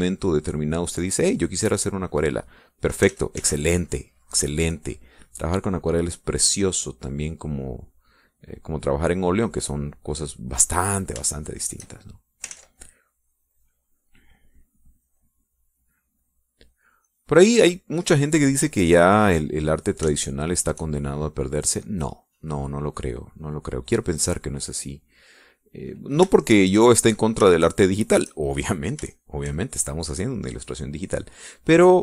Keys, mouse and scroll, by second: 1.1-2.9 drag, 3.4 click, 4.3 ctrl+z, 4.9-9.5 ctrl+drag, 9.7-10.9 drag, 12.6 shift+click, 13.8 ctrl+shift+z, 14.0-17.2 ctrl+drag, 18.3 click, 19.1 click, 19.5 click, 20.8 click, 21.4 shift+click, 22.3-27.4 shift+drag, 27.7 shift+click, 28.8 shift+click, 30.4 shift+click, 31.3-32.0 drag.